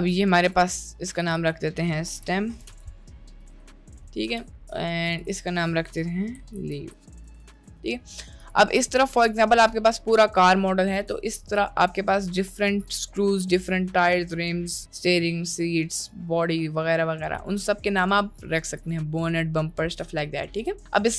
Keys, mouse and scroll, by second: 0.0 p, 0.5 click, 1.2 click, 1.5-4.4 drag, 5.3-7.6 drag, 8.5 click, 11.6 click.